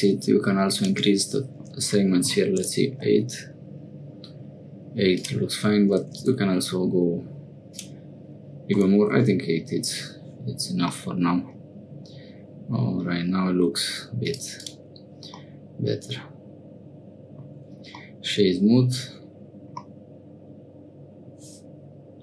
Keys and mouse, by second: 0.9-7.7 drag, 7.9-9.7 drag, 11.0-13.4 middle drag, 15.4-17.5 middle drag, 18.0 middle click, 19.8-21.2 middle drag.